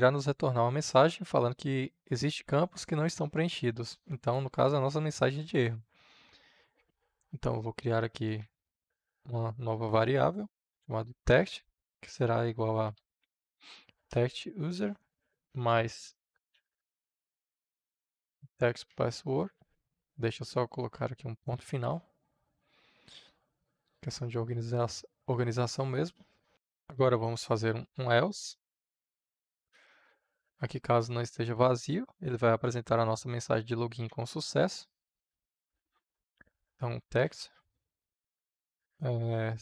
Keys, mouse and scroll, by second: 7.6-8.8 typing, 10.5 space, 11.2 space, 12.5-15.0 typing, 14.0 Return, 16.3-18.4 typing, 18.9 Down, 19.7 Return, 21.2-22.5 drag, 22.5 shift+., 23.4-24.5 drag, 24.5 shift+., 26.5 Return, 26.8-28.8 typing, 29.6 Return, 34.0 t, 34.9 e, 35.2 x, 37.1 t, 39.0 space.